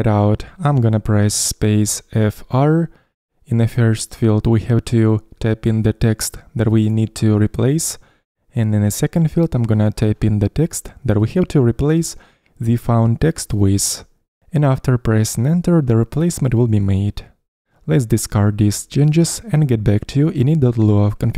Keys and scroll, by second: 2.7-3.6 typing.